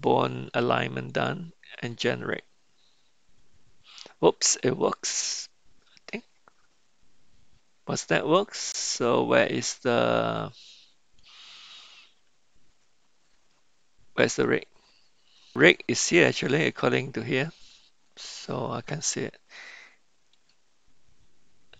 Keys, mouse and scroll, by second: 2.0 click, 9.6-11.2 middle drag, 20.3 KP_Decimal.